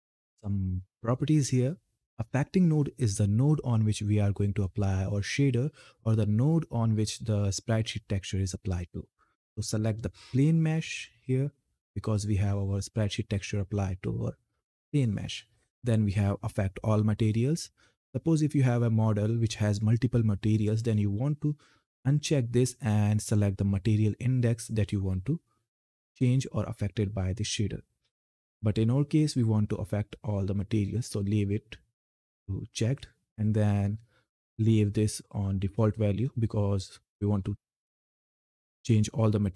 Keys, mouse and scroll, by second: 9.3 click, 21.8 click, 29.0 click.